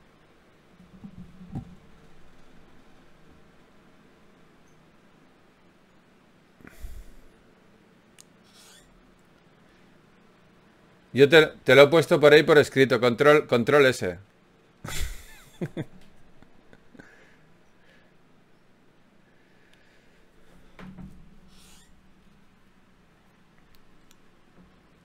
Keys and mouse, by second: 1.1-3.9 middle drag, 6.8 Tab, 7.8 ctrl+s, 12.2-14.4 middle drag, 14.4 Tab, 15.4 a, 17.2-18.6 drag, 18.6-19.6 middle drag, 20.4-25.0 middle drag.